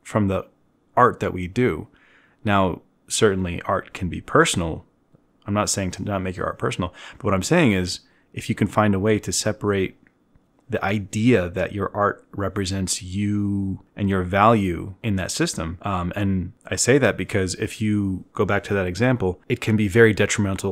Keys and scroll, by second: 7.3 ctrl+alt+1, 7.8 ctrl+alt+1, 7.8-9.3 typing.